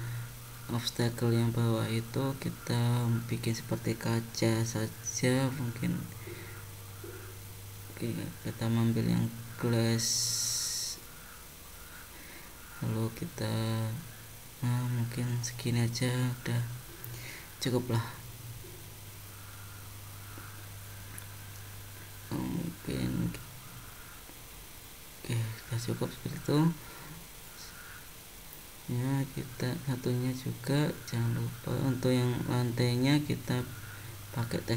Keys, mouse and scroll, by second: 0.5 middle click, 4.3 middle click, 7.6 click, 12.0 middle click, 13.2-13.6 scroll down 2, 13.8 middle click, 15.6 scroll down 1, 16.0 shift+middle click, 17.1 middle click, 18.2 middle click, 21.1 scroll down 3, 22.2 scroll down 2, 23.9 scroll up 4, 24.4-24.7 scroll down 2, 25.5 click, 26.2 middle click, 27.6 click, 29.0 click, 30.7 click.